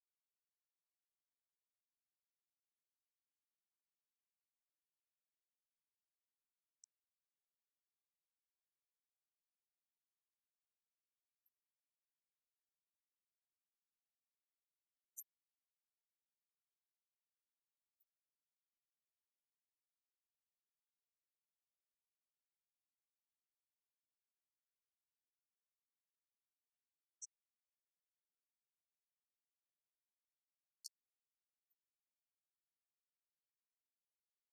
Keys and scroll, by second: 6.0 ctrl+Up, 30.7 ctrl+Home.